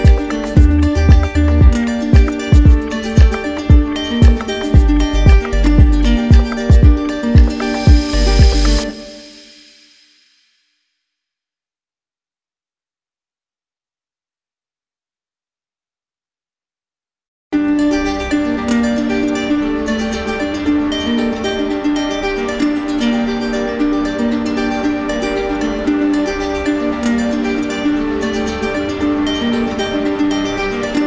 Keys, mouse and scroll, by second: 8.3 click, 9.1 ctrl+z, 10.4 z, 11.9 click, 15.0 click, 17.6 click, 17.9 d, 18.8 d, 20.1 alt+click, 20.3 ctrl+z, 22.4 click, 26.5 click, 27.4 d, 29.3 shift+click, 29.7 ctrl+z, 30.4 d.